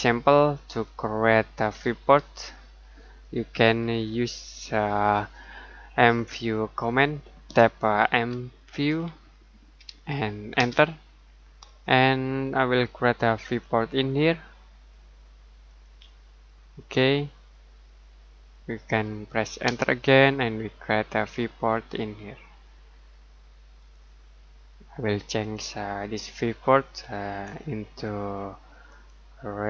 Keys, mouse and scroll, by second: 0.8 click, 3.8 Delete, 8.1 Delete, 10.5 space, 13.4 click, 15.7 click, 17.0-17.5 scroll down 1, 17.5-19.6 scroll up 1, 19.6 space, 21.0 click, 25.4 click, 27.3 F7, 28.8 click.